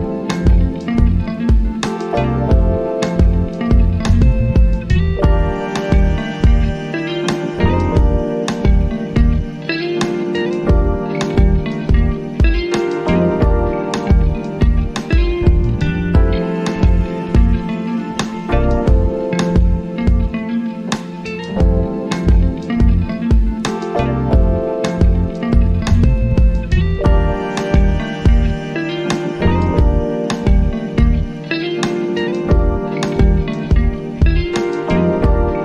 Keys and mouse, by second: 0.3 ctrl+click, 20.0 alt+click, 25.9-28.0 drag, 28.0 shift+k.